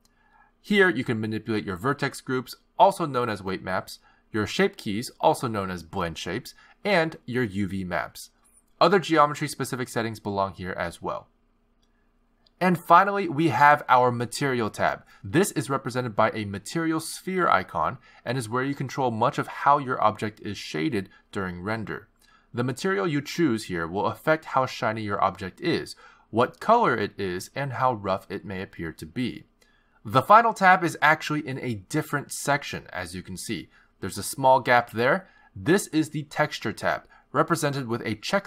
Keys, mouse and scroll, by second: 0.0 click, 0.4 x, 1.5 click, 3.6 click, 4.4 click, 5.7 click, 6.9 click, 8.2 click, 8.9 click, 14.5 click, 19.5-20.8 scroll down 12, 20.4-21.8 scroll up 14, 22.1 click, 23.1-23.8 scroll down 3, 24.2 click, 27.0-28.0 scroll down 12, 27.9-30.3 scroll up 18, 33.3 click.